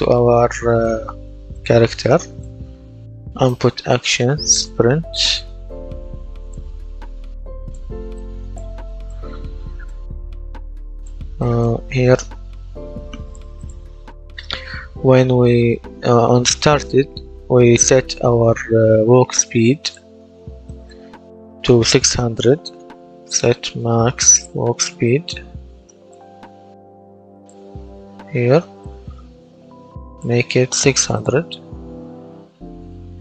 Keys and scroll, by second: 2.9-5.3 typing, 22.2-26.6 typing, 32.1-33.2 typing.